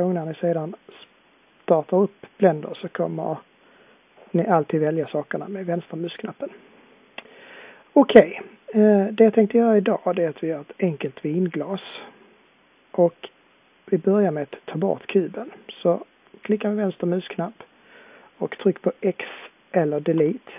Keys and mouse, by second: 20.2 Delete.